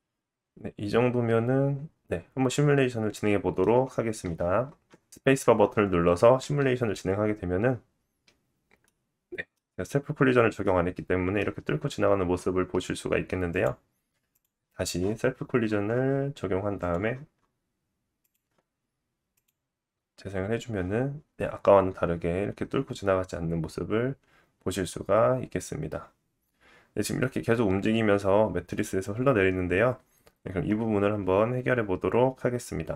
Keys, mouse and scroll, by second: 1.2-2.4 middle drag, 6.4-13.4 middle drag, 6.4 space, 9.8 scroll up 2, 10.6 scroll up 1, 13.4-18.2 drag, 15.3-16.7 scroll down 5, 17.0-18.2 scroll down 2, 18.2-19.3 middle drag, 19.3-32.9 drag.